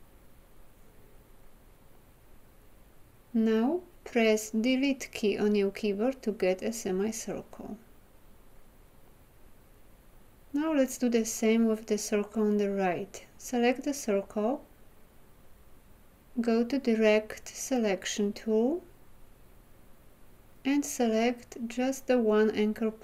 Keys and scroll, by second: 3.8 Delete.